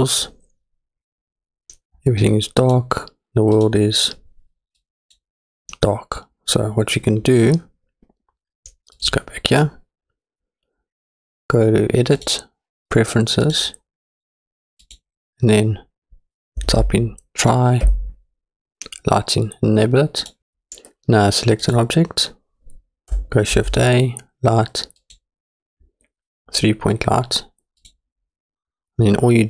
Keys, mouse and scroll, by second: 0.9 click, 2.6 click, 3.5 click, 9.1 click, 12.2-13.7 drag, 21.6 click, 23.5 shift+a, 28.1 click.